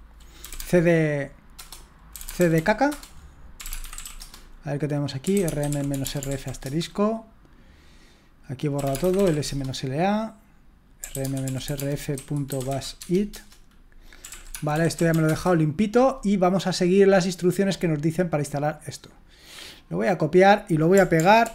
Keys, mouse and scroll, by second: 0.2-6.6 typing, 8.5-15.8 typing, 13.3 Return, 17.4-21.4 drag, 21.4 ctrl+alt+v.